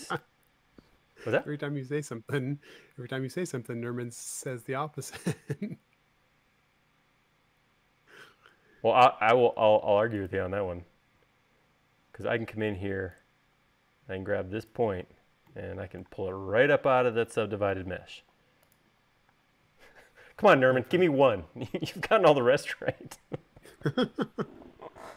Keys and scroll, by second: 17.9 super+z, 19.6 Return.